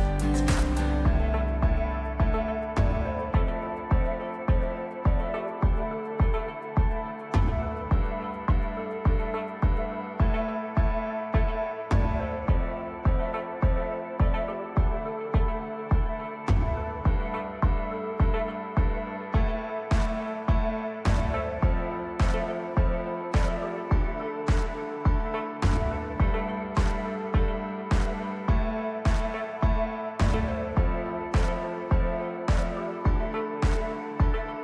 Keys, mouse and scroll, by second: 12.3 click, 27.2 click.